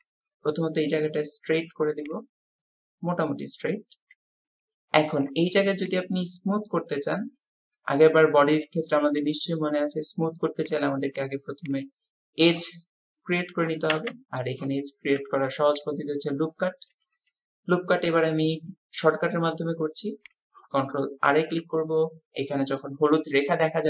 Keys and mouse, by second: 21.3 ctrl+r.